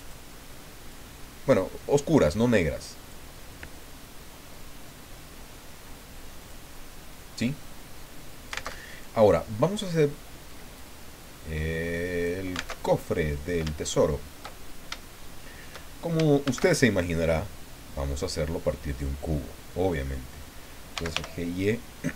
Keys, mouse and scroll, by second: 0.0 click, 0.9-3.3 drag, 6.4 click, 8.7 alt+Tab, 9.9 click, 10.7-12.4 drag, 12.7 alt+Tab, 13.9 shift+click, 14.7 shift+scroll down 2, 15.0 shift+click, 16.4 shift+a, 18.9 click, 20.7-21.6 typing.